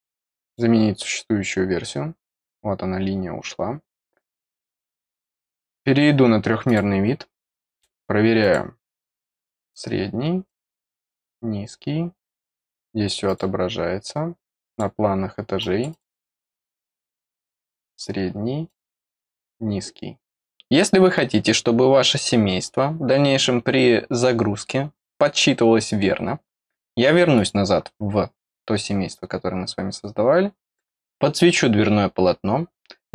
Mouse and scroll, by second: 0.4 click, 5.3 click, 6.6 click, 8.4 click, 9.2 click, 10.4 click, 11.0 click, 12.4 click, 13.2 click, 14.5 click, 15.5 click, 15.8 click, 16.9 click, 17.7 click, 18.6 click, 19.2 click, 27.3 click, 30.6 click.